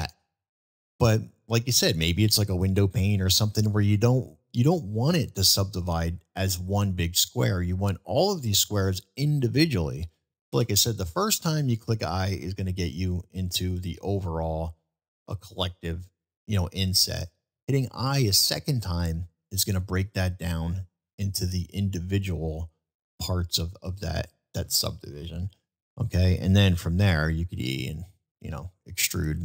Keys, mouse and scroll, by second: 0.0 ctrl+z, 0.4-1.7 middle drag, 2.5-4.0 middle drag, 4.7-5.6 middle drag, 23.6-24.0 middle drag, 24.0-25.6 scroll down 1, 25.7-26.1 shift+middle drag, 26.1 shift+scroll down 1, 28.1-28.8 middle drag, 29.3-29.4 middle drag.